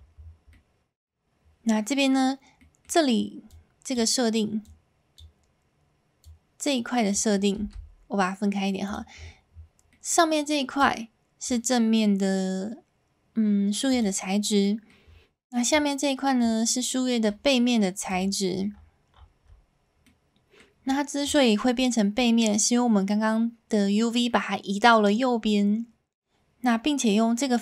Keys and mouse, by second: 10.1 middle click, 14.6 middle click, 20.2 middle click.